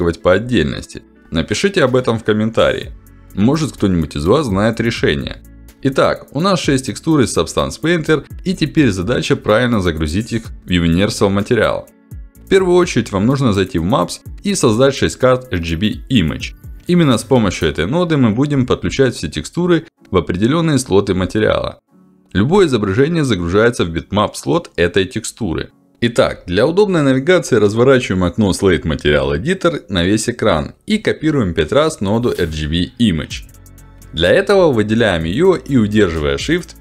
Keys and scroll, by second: 24.4 ctrl+alt+d.